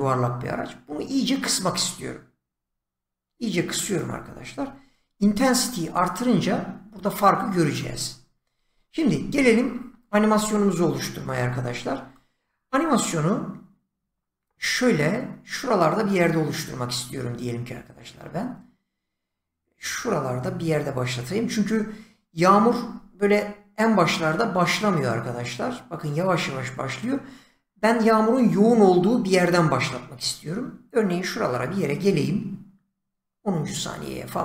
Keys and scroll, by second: 8.4 ctrl+z.